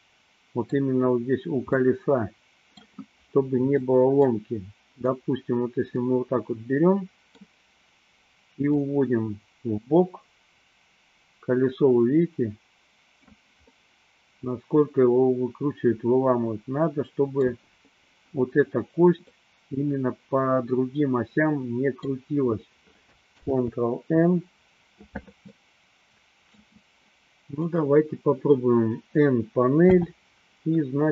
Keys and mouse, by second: 2.0-3.0 middle drag, 4.0 middle click, 5.1 click, 6.2-7.6 middle drag, 8.7-13.5 drag, 13.8-17.5 middle drag, 19.4-22.4 middle drag, 23.4 ctrl+z, 25.6-26.7 middle drag, 29.7 n.